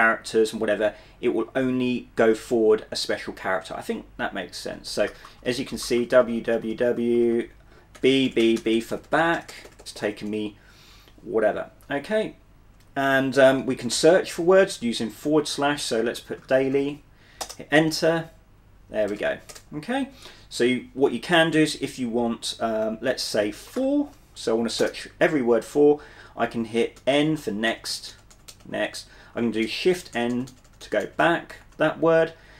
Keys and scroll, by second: 5.2-10.2 typing, 11.8 b, 14.0 /, 16.0-17.4 typing, 17.5 Return, 18.9-19.7 typing, 23.1-24.4 typing, 24.9 Return, 27.1-28.6 typing, 29.8-31.8 typing.